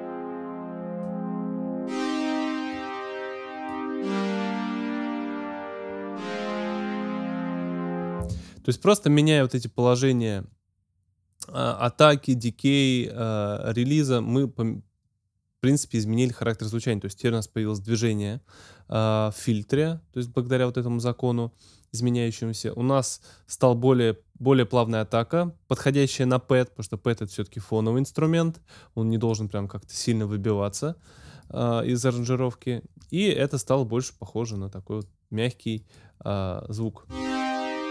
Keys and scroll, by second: 8.2 space, 37.0 space.